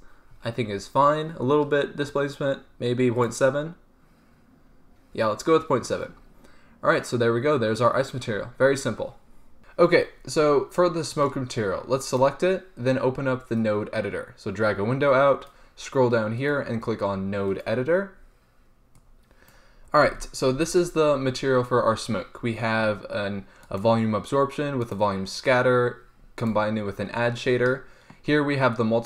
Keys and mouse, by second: 3.3-9.6 drag, 9.6 z, 12.4-13.7 drag, 14.3 click, 15.7-16.6 middle drag, 20.2 n, 20.8 n, 24.1-28.3 drag.